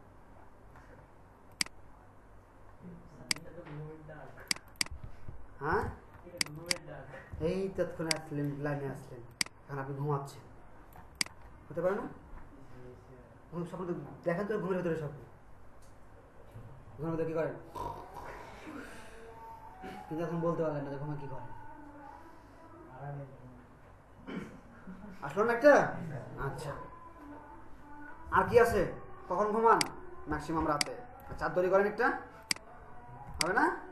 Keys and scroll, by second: 5.9 ctrl+alt+space.